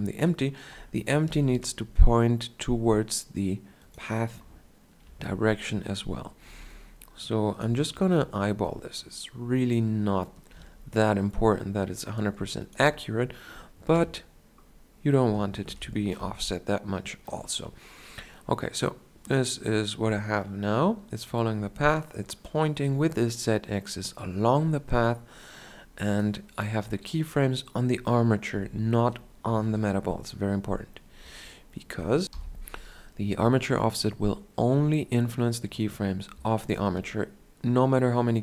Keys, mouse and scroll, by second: 1.1 r, 4.6-6.4 drag, 4.9 KP_7, 6.4 r, 8.1-10.4 drag, 10.4 r, 13.8-15.5 drag, 13.8 KP_1, 15.5 shift+Left, 28.4 KP_1, 29.6 alt+r.